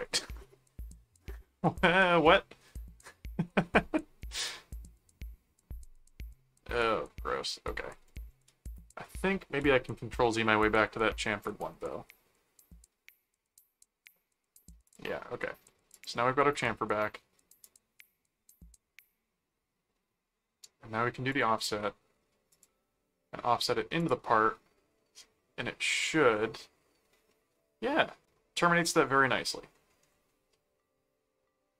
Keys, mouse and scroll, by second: 1.5-2.6 middle drag, 3.1-4.3 middle drag, 4.8 middle click, 8.3 ctrl+z, 9.5 ctrl+z, 11.3 ctrl+z, 14.9 click, 15.9 click, 21.3 click, 22.5 click, 24.0 click, 26.4 middle click, 27.3 middle click, 28.8 middle click, 30.8-31.7 middle drag.